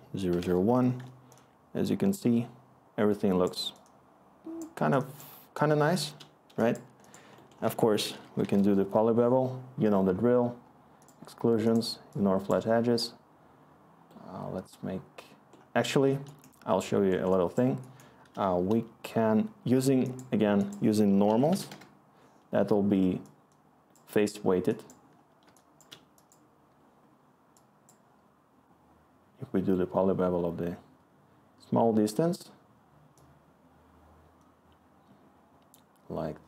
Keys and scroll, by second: 0.0-2.2 typing, 4.7-6.0 Return, 6.7 Return, 7.6 Tab, 7.8-8.9 typing, 16.6-17.4 scroll, 20.9 Tab, 21.0-22.0 typing.